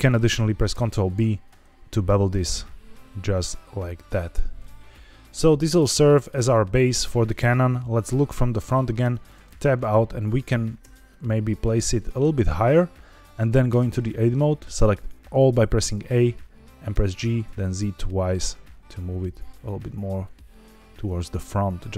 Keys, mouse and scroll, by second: 0.6 ctrl+b, 4.1 click, 4.5-6.2 middle drag, 8.4 KP_1, 8.9 Tab, 10.7 g, 11.2 z, 13.0 click, 13.6 Tab, 14.7 a, 16.8 g, 17.1 z, 17.4 z, 21.0 click, 21.3 middle click.